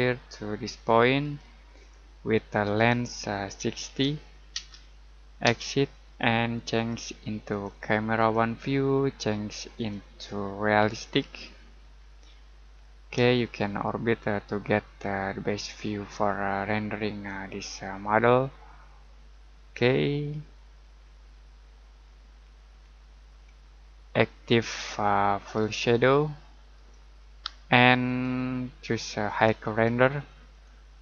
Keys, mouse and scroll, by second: 3.4-4.5 typing, 6.7 click, 11.8-12.8 scroll down 1, 12.8 middle click, 13.4 shift+middle click, 17.4 middle click, 18.2-18.5 scroll up 1, 18.5 middle click, 22.1 scroll down 1, 22.4-23.1 scroll up 1, 23.1 scroll down 1, 23.4-24.0 scroll up 1, 24.0 middle click, 25.6 click.